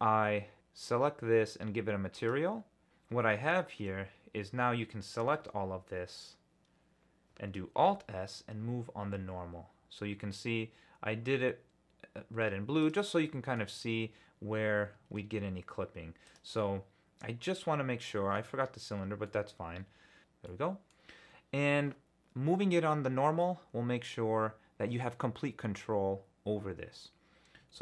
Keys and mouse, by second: 3.3 middle click, 3.9 Tab, 5.4 a, 7.8 alt+s, 12.8 click, 13.2 middle click, 15.1 alt+s, 16.2 click, 16.5-17.9 middle drag, 17.9 click, 18.0 middle click, 18.0 click, 18.0 middle click, 19.3 middle click, 20.5 middle click, 23.4-25.0 middle drag.